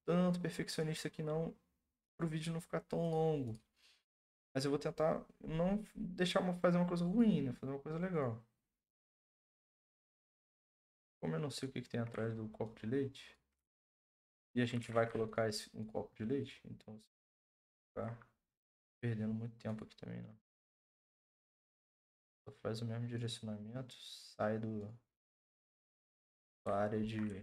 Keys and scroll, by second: 13.6 ctrl+z, 14.8 ctrl+z, 20.3 ctrl+z.